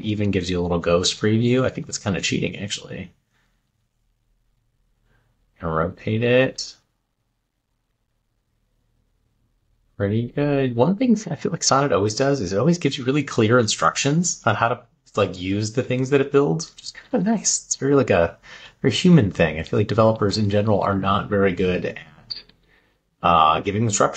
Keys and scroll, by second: 0.8 Down, 1.3 Left, 3.3 Right, 3.9 Down, 4.3 Up, 5.6 Left, 6.0 Down, 6.7 Right, 10.5 Left, 11.1 Left, 16.2 Right, 19.5 Up, 20.0 Left, 22.6 Right.